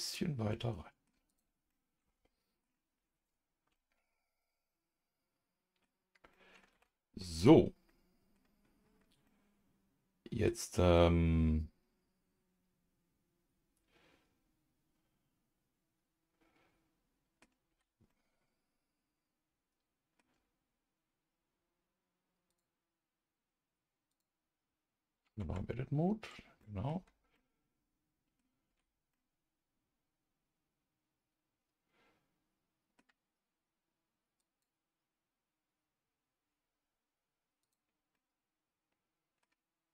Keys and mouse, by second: 0.5 middle click, 1.3 click, 1.7 middle click, 3.7-5.8 middle drag, 6.3 middle click, 7.0 ctrl+s, 7.4 click, 7.9 middle click, 9.2-10.4 middle drag, 10.9-17.4 middle drag, 18.1-20.2 middle drag, 18.1 a, 22.5 click, 24.1 click, 25.4 Tab, 26.6 middle click, 26.9 a, 27.3-28.4 middle drag, 28.7 a, 29.1-33.0 middle drag, 37.6 click, 38.1-39.4 middle drag.